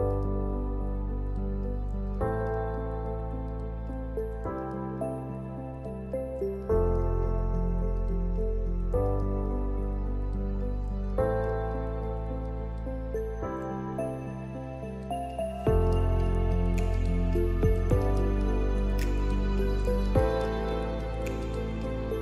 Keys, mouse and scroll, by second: 0.0 scroll down 1, 0.1 middle click, 0.1 r, 0.4 g, 1.8-2.1 shift+middle drag, 2.3-4.1 drag, 4.4 shift+click, 4.8 scroll up 1, 4.9 middle click, 5.3 g, 6.3 middle click, 6.4 scroll up 2, 6.6 shift+middle click, 7.3 right click, 8.1 click, 8.3 Tab, 8.5 a, 8.6 l, 8.8 middle click, 8.9 g, 9.6 scroll down 4, 9.8 shift+middle click, 10.1 shift+d, 10.7 middle click, 10.8 g, 11.3 s, 11.6 g, 12.3 middle click, 12.5 Tab, 12.8 middle click, 13.1 click, 13.3-15.3 typing, 13.6 scroll down 5, 14.0 scroll up 4, 15.0 middle click, 16.8 r, 16.9-17.8 middle drag, 17.8 click, 18.2-18.6 scroll up 4, 18.3 shift+middle click, 18.6-19.6 middle drag, 19.6 scroll up 2, 19.7 middle click, 19.8 g, 20.6 s, 21.6 middle click, 21.8 scroll down 2, 21.9 g.